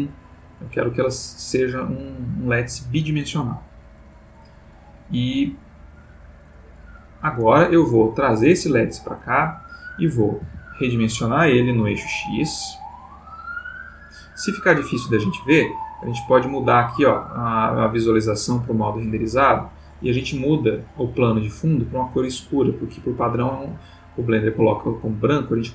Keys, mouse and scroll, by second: 0.6-4.6 middle drag, 6.7 click, 7.6 g, 8.6 click, 10.4 s, 11.8 x, 13.9 click, 15.9 click, 19.7 click, 21.5 click, 22.4-23.4 drag, 24.6-25.7 drag.